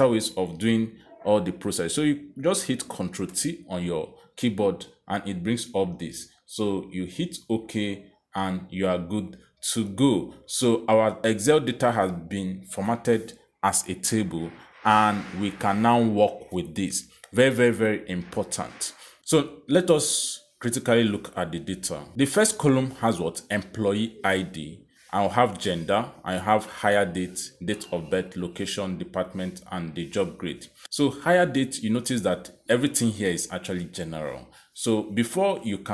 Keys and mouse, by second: 0.2 click, 1.4 click, 2.6 click, 4.3 ctrl+t, 7.9 click, 10.2 click, 11.6 click, 14.2 click, 15.9 click, 18.0 click, 23.1 click, 25.9 click, 26.8 click, 28.6 click, 29.6 click, 30.8 click, 32.7 click, 34.0 click, 35.4 click.